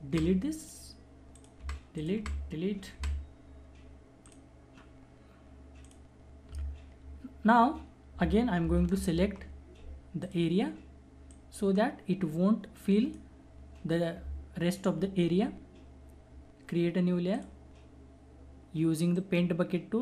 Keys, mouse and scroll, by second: 0.1 alt+Delete, 0.6 alt+click, 1.6 alt+Delete, 2.0 alt+click, 2.2 alt+Delete, 4.2 alt+click, 8.6 ctrl+alt+Num_Lock, 8.6 alt+click, 8.9 ctrl+alt+-, 10.2-15.6 alt+drag, 17.3 alt+click, 19.1 alt+right click.